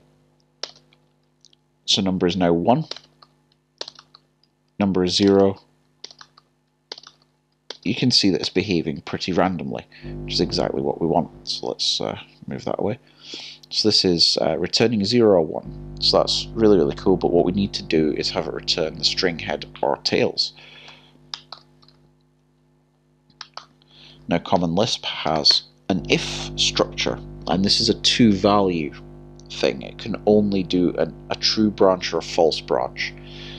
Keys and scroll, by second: 0.0-0.6 typing, 2.9-3.8 typing, 6.9 typing, 21.5 typing, 23.6 ↻.